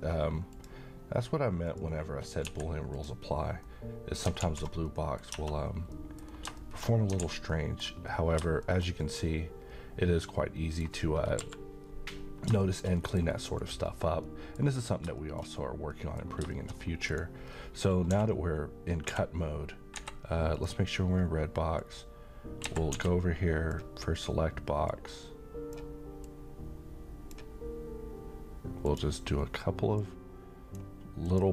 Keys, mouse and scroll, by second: 2.2 shift+click, 2.4 x, 2.9 click, 3.6-4.2 middle click, 4.4 alt+z, 4.9-5.5 middle click, 5.3 Tab, 5.6-5.9 scroll down 1, 5.9 middle click, 6.2 scroll down 1, 6.6 middle click, 6.8 scroll down 1, 7.2 a, 7.5 middle click, 8.0-8.3 scroll down 1, 8.6-10.8 shift+middle drag, 12.3 scroll down 1, 12.6 middle click, 13.5 click, 14.2-14.8 middle click, 14.8 scroll up 1, 15.2 shift+middle click, 15.4 shift+scroll up 1, 15.9 middle click, 16.7-17.0 scroll up 1, 17.0 click, 17.4 scroll up 1, 18.1 d, 19.0 d, 20.0 Escape, 20.5 click, 22.6 Escape, 22.9 d, 24.8-25.8 drag.